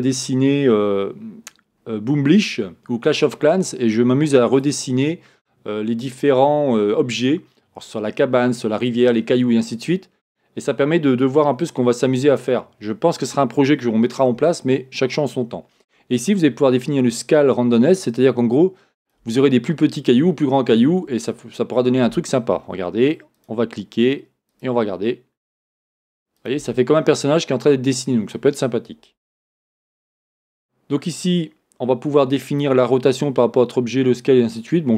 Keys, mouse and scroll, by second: 21.5-21.8 scroll down 1, 21.8-23.4 scroll up 1, 24.5-26.6 drag, 27.0 scroll down 1, 27.4 scroll up 1, 30.0-32.1 scroll down 1.